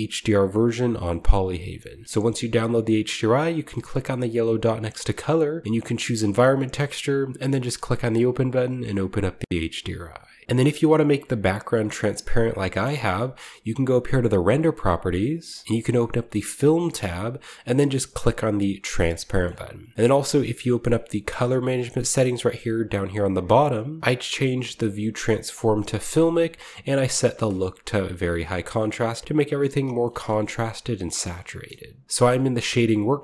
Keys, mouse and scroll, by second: 2.3-3.3 drag, 5.0-5.6 drag, 10.7 shift+middle click, 12.0-13.8 middle drag, 13.8-15.4 drag, 15.5-18.0 drag, 18.2-20.3 drag, 19.2-20.5 shift+middle drag, 20.9-22.9 drag, 25.4 click, 26.0 click, 27.4-28.9 drag, 30.1-32.0 shift+middle drag, 32.0 ctrl+b.